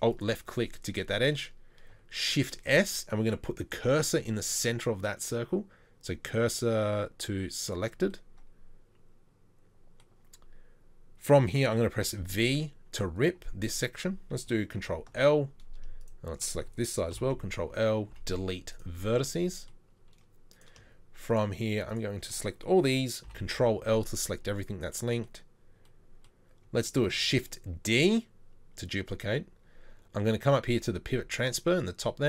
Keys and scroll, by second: 2.3 shift+s, 12.0 v, 14.8 ctrl+l, 17.1 ctrl+l, 18.1 Delete, 23.2 ctrl+l, 27.1 shift+d.